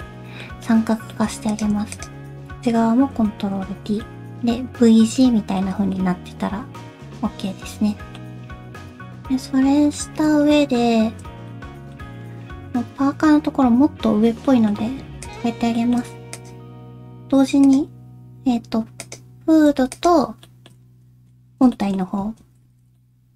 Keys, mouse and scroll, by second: 0.0 middle click, 0.6 middle click, 1.5 click, 1.9 shift+click, 3.1 ctrl+t, 3.6 middle click, 5.1 middle click, 5.8 scroll down 2, 5.9 middle click, 8.6-9.0 scroll up 2, 9.0 middle click, 9.0 scroll down 4, 11.5 middle click, 12.1 scroll down 1, 12.2-13.6 scroll up 2, 14.4 middle click, 15.2 shift+click, 15.7 shift+middle click, 16.3 click, 16.7-17.4 scroll down 1, 17.6 click, 19.0 click, 19.9 shift+click, 20.4 shift+middle click, 20.8 scroll up 2, 21.1 Tab, 21.7 shift+middle click, 22.0 scroll up 1, 22.2 1, 22.7 alt+z, 22.9 middle click.